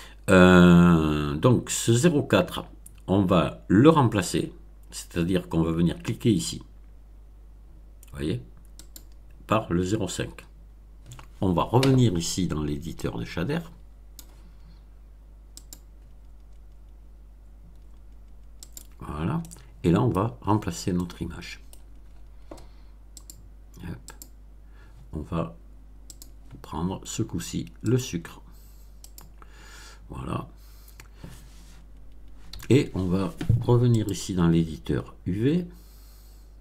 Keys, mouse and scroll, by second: 8.8 click, 12.9-14.3 drag, 15.5 click, 18.6 click, 19.3 middle click, 20.9-21.8 middle drag, 21.9-22.3 scroll up 2, 23.1 click, 24.0 click, 26.0 click, 27.8 click, 29.0 click, 32.4 n, 33.9 click.